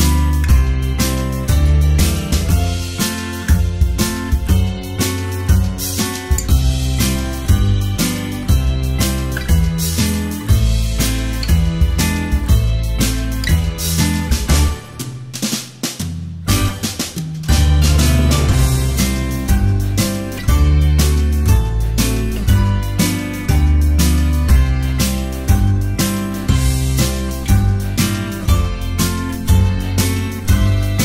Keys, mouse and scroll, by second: 0.0-0.2 typing, 1.3-4.5 typing, 4.3 right click, 5.4 ctrl+s, 5.8-24.9 typing, 25.6 ctrl+s, 25.9 space, 26.9 space, 27.4 space, 28.8 space, 29.4 space, 30.3 space.